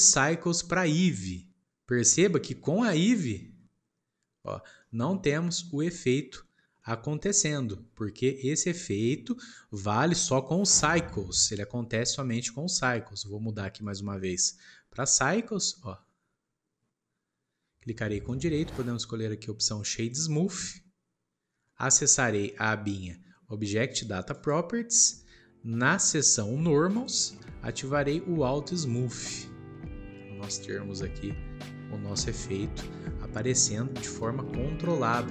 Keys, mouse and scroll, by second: 0.0-2.2 drag, 2.4 scroll down 1, 2.8-4.3 middle drag, 4.3-4.8 scroll up 1, 4.8-6.6 middle drag, 6.6 scroll down 1, 6.8-8.3 middle drag, 8.3-8.6 scroll down 1, 8.6-9.8 middle drag, 9.8-10.6 scroll up 2, 10.6 scroll down 1, 11.4-13.8 middle drag, 13.8-16.9 drag, 18.3-21.3 right drag, 24.3 click, 26.9-29.0 drag, 34.1-35.3 shift+middle drag.